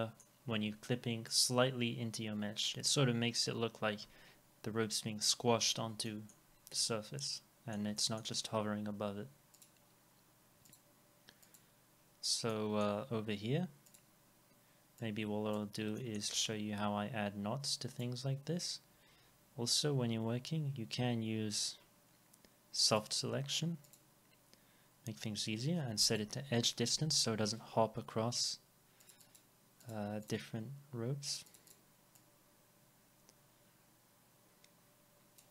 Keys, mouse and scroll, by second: 5.7-6.0 scroll down 1, 6.1 middle click, 6.9 alt+middle click, 8.0 middle click, 8.4 scroll up 1, 12.2 scroll down 1, 12.5 middle click, 16.4 alt+x, 18.9 scroll down 1, 21.4-21.7 scroll up 1, 29.2 double click.